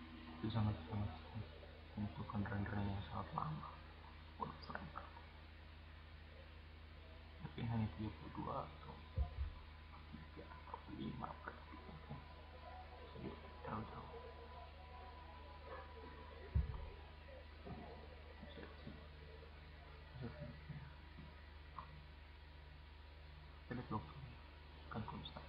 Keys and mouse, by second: 0.1-1.6 middle drag, 5.2 right click, 12.6-14.6 drag, 19.2-20.2 drag, 21.2-22.3 drag, 22.6 click, 23.1 drag.